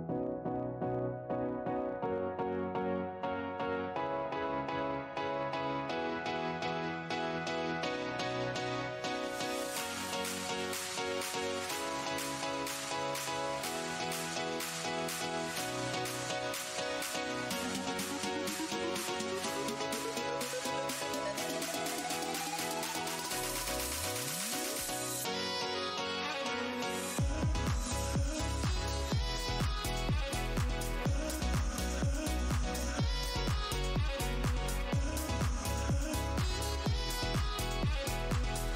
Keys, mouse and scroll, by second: 0.4 shift+Tab, 1.4 alt+click, 1.5 alt+Tab, 2.3 alt+scroll up 1, 3.0 alt+scroll down 1, 4.2 click, 5.1 alt+scroll up 1, 5.8 shift+Tab, 6.7-7.2 scroll down 1, 7.5 alt+click, 9.4 alt+Tab, 10.1 right click, 10.3 click, 10.8 ctrl+Tab, 10.9 ctrl+click, 11.8 ctrl+shift+Tab, 12.6-13.0 scroll up 1, 13.2 shift+Tab, 14.3 Tab, 15.9 Delete, 16.5 Delete, 16.8 Tab, 17.3 Tab, 17.6 click, 18.3 Tab, 19.3 alt+scroll down 1, 19.9-20.3 alt+scroll down 1, 20.6 alt+Tab, 21.6 shift+Tab, 23.4 shift+click, 24.1 shift+Tab, 25.2 alt+scroll up 1, 25.5 w, 26.1 click, 26.4 click, 26.6 shift+Tab, 27.8 ctrl+click, 28.4 Tab, 28.9 click, 29.2 click, 29.3 alt+scroll down 1, 30.3 alt+scroll down 1, 30.4 shift+Tab, 31.0 alt+Tab, 31.1-31.4 alt+scroll up 2, 31.5 Tab, 32.1 click, 32.9 click, 34.2 alt+Tab, 34.6 alt+click, 35.3 alt+click, 35.8 shift+Tab, 36.6 alt+w, 37.5 alt+Tab, 37.7 click, 38.1 alt+click, 38.6 alt+click.